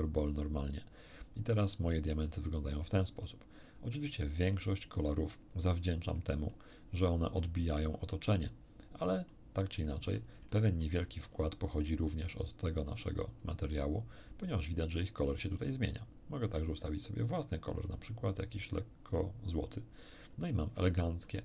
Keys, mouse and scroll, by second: 0.0 click, 1.7 middle click, 2.8 middle click, 4.2 middle click, 5.3 middle click, 6.1 middle click, 7.5 shift+middle click, 8.5 shift+middle click, 9.0 shift+middle click, 9.9 middle click, 10.5 shift+middle click, 12.6-13.9 drag, 16.4 click, 17.9-19.7 drag, 20.5 scroll down 1, 20.9-21.4 shift+middle drag.